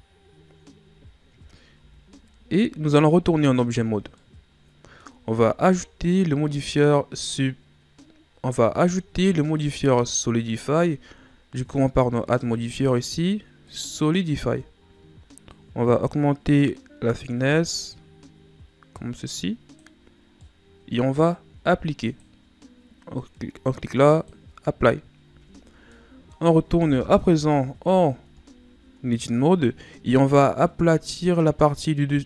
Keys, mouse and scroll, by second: 1.0-1.3 shift+scroll down 2, 1.8 z, 2.5-3.1 ctrl+scroll up 1, 3.1 Tab, 3.5-4.2 scroll down 1, 4.2-5.3 middle drag, 5.3-5.9 shift+scroll down 4, 5.9-6.7 scroll up 2, 12.2 click, 13.8 click, 15.5 click, 20.4-22.1 middle drag, 22.1 click, 25.2 Tab, 25.6-25.9 scroll down 1, 25.9-27.2 middle drag, 27.2 KP_1, 28.6-31.7 shift+scroll up 3.